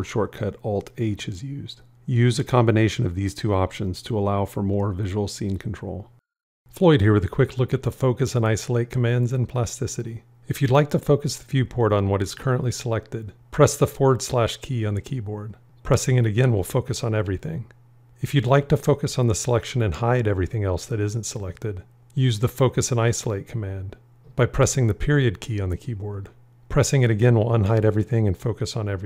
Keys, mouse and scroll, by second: 14.4 /, 16.5 /, 24.7 ., 27.4 ..